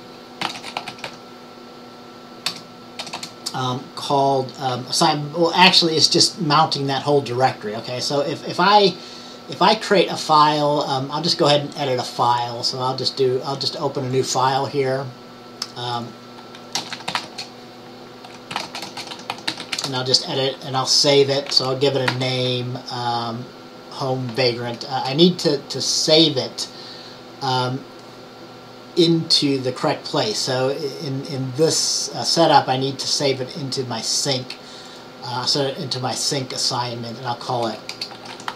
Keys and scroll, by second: 0.3-1.7 typing, 16.8-20.2 typing, 22.2 ctrl+s, 25.1 ▯, 37.8-38.5 typing.